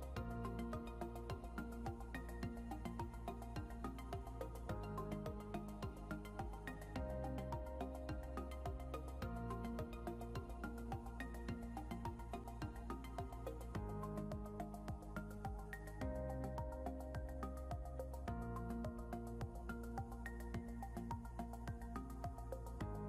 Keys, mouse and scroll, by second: 14.2 scroll down 1, 16.9 scroll up 1, 18.2 Down, 19.2 scroll, 19.3 scroll down 1.